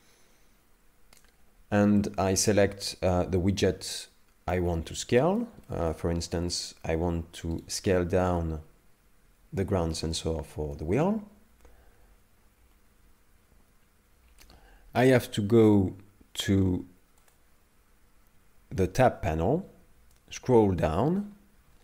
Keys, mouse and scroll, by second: 2.0 shift+middle click, 3.6 middle click, 5.7 shift+middle click, 6.1-6.7 scroll up 1, 6.7 scroll up 1, 7.6 right click, 7.9 middle click, 10.4 shift+middle click, 17.3 click, 20.2-21.8 scroll down 21.